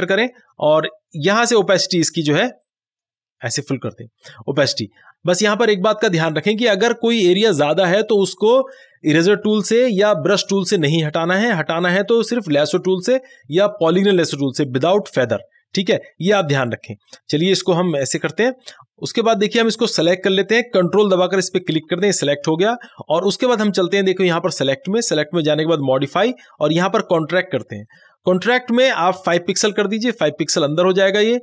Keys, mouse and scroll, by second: 1.6-7.3 drag, 7.3 ctrl+=, 8.6 space, 8.8 click, 9.1 space, 17.2 ctrl+-, 21.1 ctrl+d, 21.6 click, 21.7 ctrl+click, 24.6 click, 27.9 click, 27.9 click.